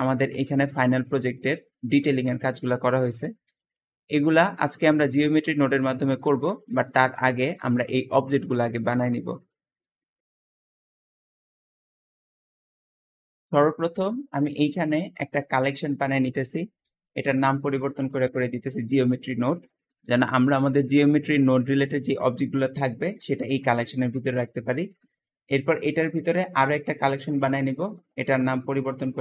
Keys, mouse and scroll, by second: 0.6 scroll down 1, 1.0 click, 1.5 middle click, 1.9 g, 2.9 click, 3.5 g, 4.3-6.0 middle drag, 6.0-6.4 scroll up 3, 6.4 shift+middle click, 7.1 shift+click, 7.5 g, 8.2 click, 8.5 g, 12.8-14.3 shift+middle drag, 14.3-15.5 shift+drag, 15.6-18.8 drag, 16.7 ctrl+v, 18.1 Return, 19.7-21.5 middle drag, 22.1-22.8 middle drag, 24.3-24.7 scroll up 1, 24.7-26.8 shift+middle drag, 26.8-27.9 drag, 28.0-29.2 drag, 28.8-29.2 typing.